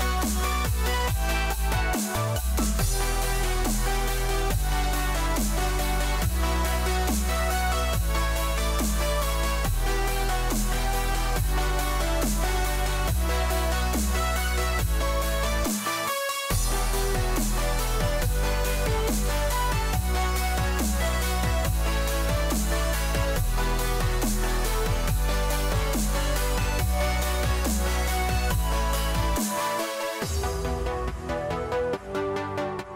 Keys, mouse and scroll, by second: 3.3-8.1 scroll down 1, 8.1 e, 17.3-18.3 scroll down 5, 18.3-23.3 scroll down 1, 23.3-27.3 scroll down 1, 27.3 shift+a.